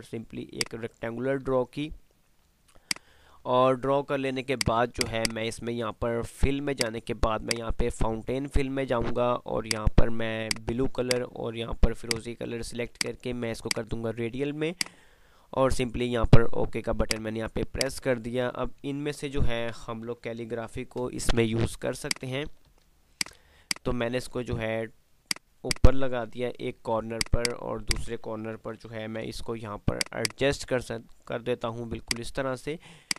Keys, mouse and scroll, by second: 1.9 F3, 2.1 F2, 4.6 click, 5.9-19.9 drag, 19.9 ctrl+z, 21.1 shift+Page_Up, 21.8 shift+click, 22.1-23.3 typing, 23.3 click, 27.5 right click, 27.9 shift+click, 28.0-30.1 typing, 30.1-33.1 drag.